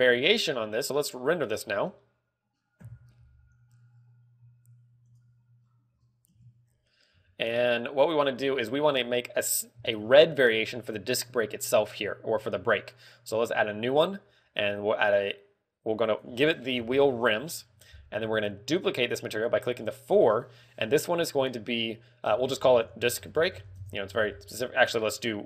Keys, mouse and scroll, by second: 0.1 shift+middle click, 1.0 click, 5.0 KP_Decimal, 5.6 click, 6.2 scroll down 3, 8.1 middle click, 9.1 Tab, 9.5 a, 10.3 l, 14.4 click, 16.6 click, 20.2 click, 20.7 click.